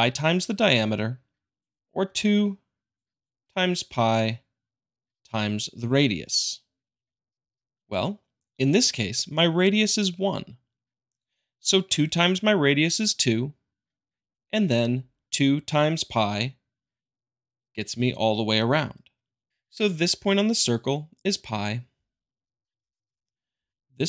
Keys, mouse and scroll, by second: 0.2-1.3 drag, 1.8 click, 3.0-4.0 drag, 6.4-7.5 drag, 19.5 click, 22.8-23.9 drag.